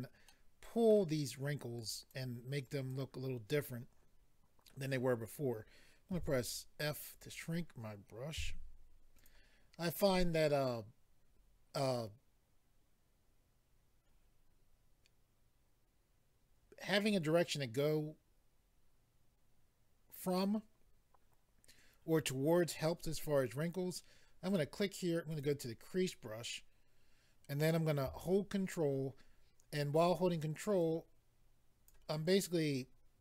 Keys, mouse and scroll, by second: 0.3 middle click, 1.8 click, 2.6 click, 3.6 middle click, 6.1 f, 7.1 click, 8.3 f, 9.1 click, 24.5 click, 24.6 click, 25.3 click, 25.4 click, 30.8 ctrl+click, 32.6 ctrl+click.